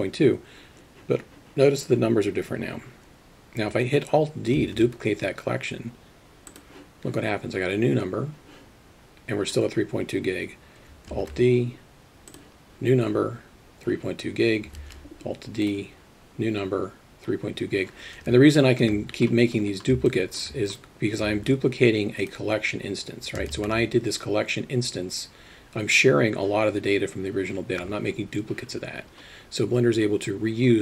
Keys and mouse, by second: 5.0 alt+d, 11.5 alt+d, 15.2 alt+d, 17.1 middle click, 18.6 shift+middle click, 20.2 alt+shift+middle drag, 21.8 alt+d, 23.6 shift+a.